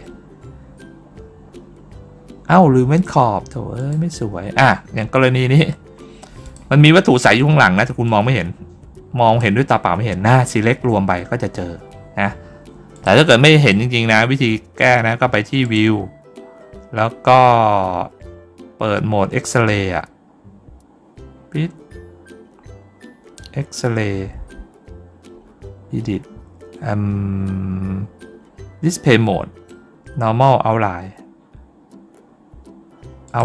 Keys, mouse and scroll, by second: 3.6 click, 5.1 ctrl+middle click, 6.3 click, 7.9-9.2 drag, 12.8 click, 13.5 click, 15.5 click, 33.1 click.